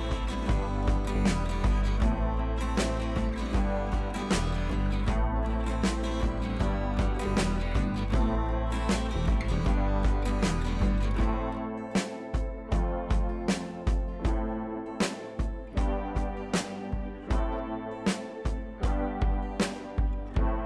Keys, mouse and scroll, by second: 0.5 right click, 2.0 click, 4.2 ctrl+[, 4.8 click, 5.3 right click, 5.8 click, 7.2-7.8 scroll down 2, 8.4 alt+scroll up 1, 8.6-9.1 drag, 9.8-10.2 shift+click, 10.5-11.0 click, 15.2 click, 17.4-18.0 click, 18.2-20.4 scroll down 1.